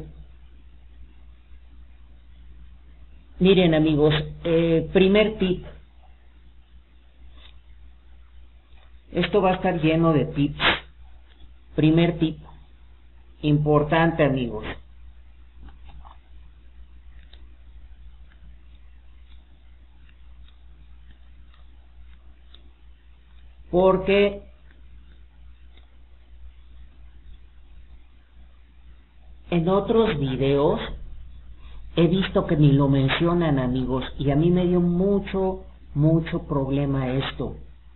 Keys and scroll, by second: 13.1 alt+d, 35.2 Escape.